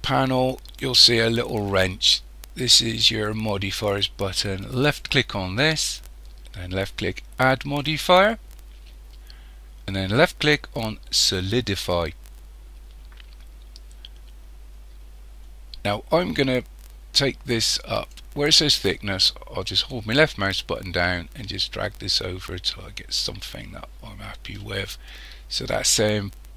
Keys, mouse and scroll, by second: 4.8 click, 7.4 click, 17.5 click, 20.6 click.